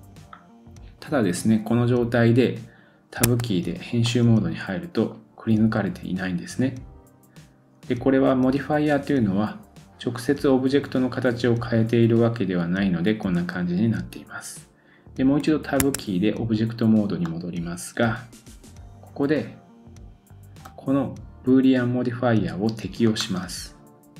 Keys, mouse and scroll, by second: 0.4-2.5 scroll down 1, 3.3 Tab, 4.0 middle click, 17.2 middle click, 20.6-24.1 middle drag, 20.6-24.1 right drag.